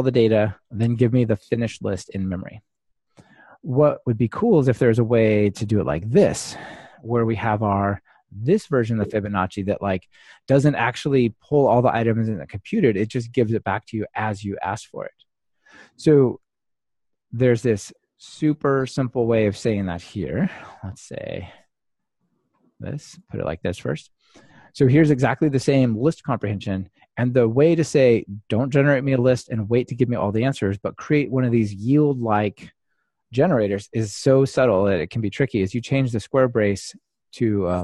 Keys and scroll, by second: 20.3 super+c, 21.8 super+c, 22.2 super+/, 23.1 super+/, 23.1 super+v, 37.4 Delete.